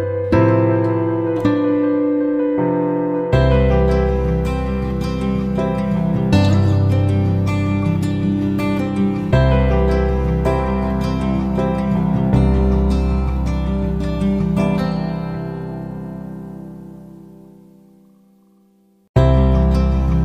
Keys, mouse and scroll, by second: 0.1 click, 5.9 click, 7.0 click, 16.9 shift+click, 17.5-20.2 shift+drag.